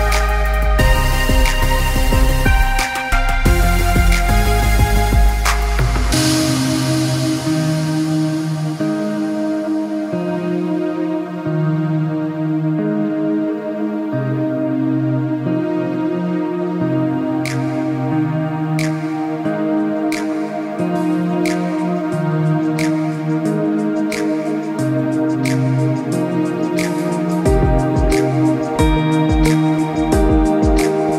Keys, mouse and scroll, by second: 4.8 alt+scroll down 1, 5.7 click, 9.7 click, 13.1 ctrl+z, 13.7 z, 13.9 click, 17.1 click, 19.0 click, 22.7 KP_1, 22.8 KP_0, 23.8 click, 25.6 KP_1, 25.7 KP_2, 25.8 KP_5, 26.6 click, 28.3 click.